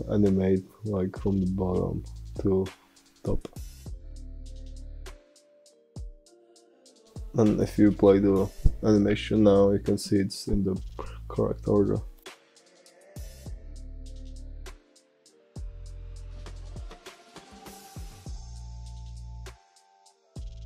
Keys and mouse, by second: 0.1 middle click, 2.8-4.8 drag, 6.6-8.2 drag, 14.6 space.